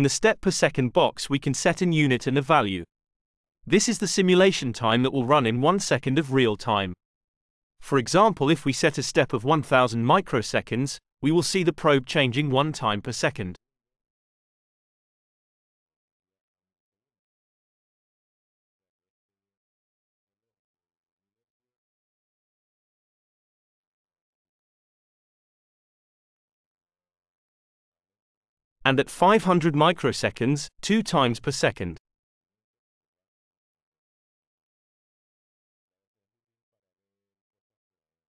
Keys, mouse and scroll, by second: 8.3-10.3 drag, 11.2 BackSpace, 15.6 Return, 21.0 click, 25.6 click, 28.5-29.9 drag, 30.8 5, 31.3 Return.